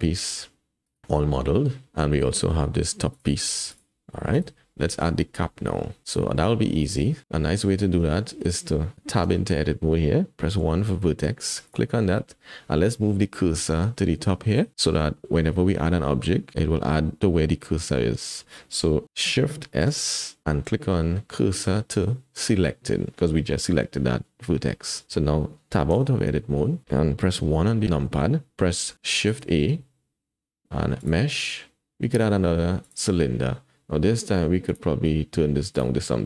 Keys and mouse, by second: 3.1 click, 3.7 click, 3.9 g, 4.7 shift+click, 6.3 click, 7.9 Tab, 8.9 Tab, 9.3 Tab, 10.5 1, 11.6 click, 19.8 shift+s, 24.2 click, 25.9 Tab, 27.6 KP_1, 29.4 shift+a, 34.6 click, 35.7-36.2 drag.